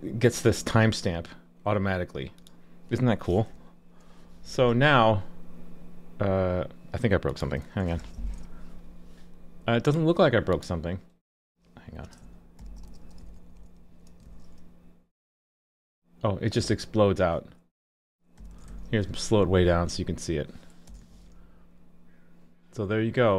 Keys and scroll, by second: 4.6 super+s, 8.0 alt+super+j, 14.2 super+s, 18.7 super+s, 21.0 super+s.